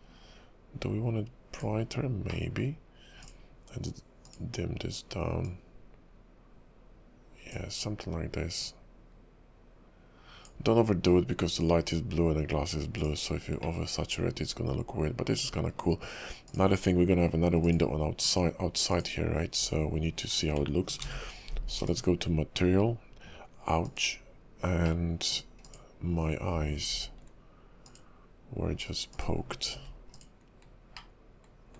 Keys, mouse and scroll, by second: 13.8 middle click, 15.8-16.4 scroll down 2, 16.4 click, 17.6 click, 19.6 click, 21.0 alt+m, 24.1 click, 25.0 middle click, 25.6 click, 26.9 alt+m, 29.1 click, 29.7 alt+m, 31.1 middle click.